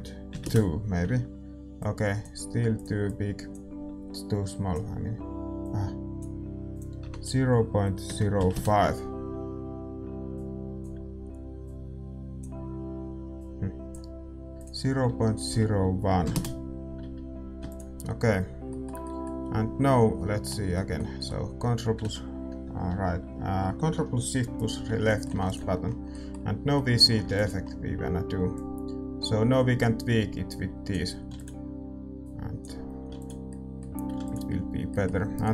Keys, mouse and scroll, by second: 2.2-8.5 drag, 10.8-18.0 drag, 18.0 ctrl+s, 18.6-24.5 middle drag, 24.5-35.5 drag, 25.0-28.5 middle drag, 26.1 ctrl+s, 28.5 ctrl+s, 33.4 middle click.